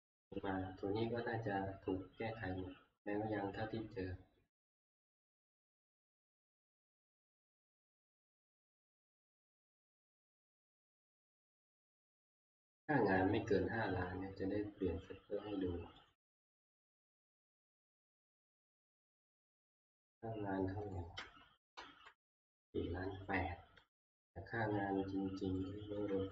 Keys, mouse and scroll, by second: 9.1 click, 10.3 ctrl+click, 12.2 click, 16.2 click, 16.9 click, 19.3 click, 20.9 click, 21.6 Tab, 21.8 Right, 25.7 click.